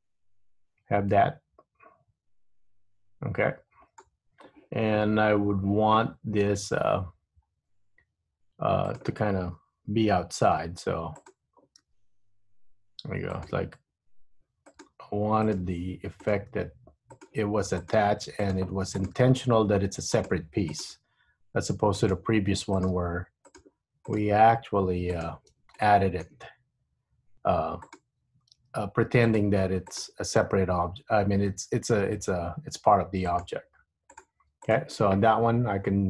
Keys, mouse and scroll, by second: 7.2-7.6 scroll up 2, 7.6-8.2 scroll down 1, 8.2 Tab, 9.0 click, 10.6 r, 12.0 g, 14.8 click, 15.0 g, 16.4 click, 16.7 g, 18.0 click, 18.1 g, 19.1 click, 19.2 g, 20.8 click, 21.1 g, 22.9 click, 23.0 g, 24.2 click, 24.3 g, 25.9 shift+middle click, 28.0 click, 28.7 g, 30.0 click, 30.2 g, 33.1 g, 34.2 click, 34.8 click.